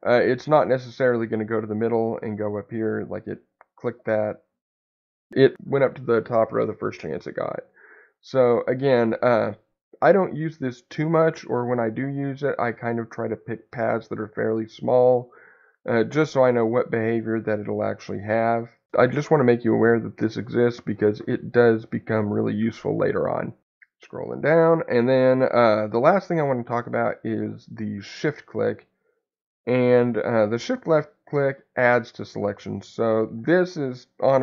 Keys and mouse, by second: 13.3 ctrl+click.